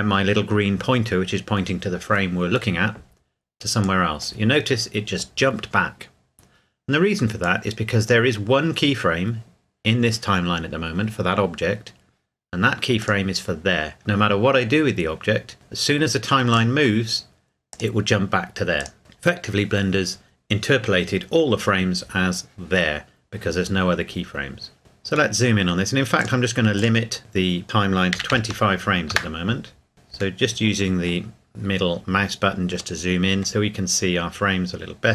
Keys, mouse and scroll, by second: 3.8 click, 7.4 click, 13.0 click, 16.5 click, 24.8 scroll up 1, 25.3 middle click, 26.2 click, 28.1 KP_2, 28.3 KP_5, 29.1 KP_Enter, 29.9-30.4 scroll up 1, 30.4 middle click, 31.6 scroll up 1, 32.2 scroll up 1, 33.0 middle click, 33.8 scroll up 1, 35.0-35.1 scroll up 1.